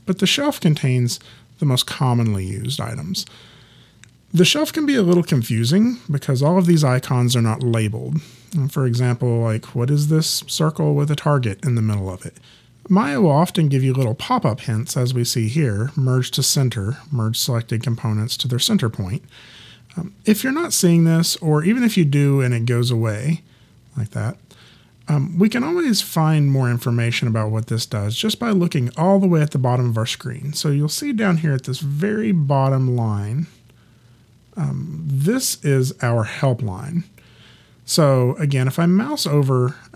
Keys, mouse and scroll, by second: 0.3 click.